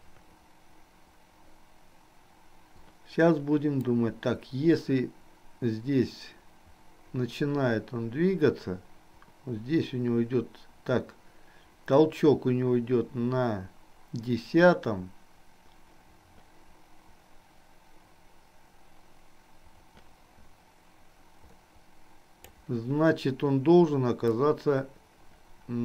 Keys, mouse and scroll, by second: 4.0-22.7 drag, 24.2-25.8 drag.